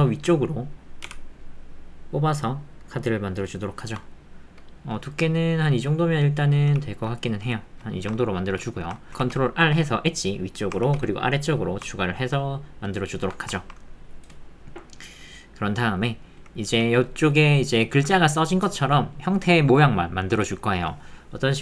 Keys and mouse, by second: 1.0 z, 4.0-7.8 drag, 7.9 shift+middle click, 8.2 ctrl+middle click, 8.5 click, 8.7 shift+click, 9.0 ctrl+click, 9.1 ctrl+z, 12.0 ctrl+middle click, 12.4 middle click, 12.9 click, 13.2 Tab, 13.6 ctrl+click, 16.4 alt+click.